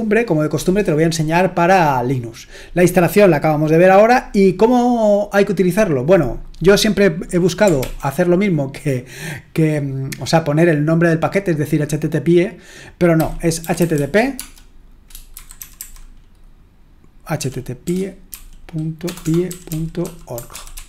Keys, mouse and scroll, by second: 1.0-3.3 scroll down 4, 3.4-6.2 scroll down 2, 6.2 click, 7.8 ctrl+l, 12.9-20.8 typing.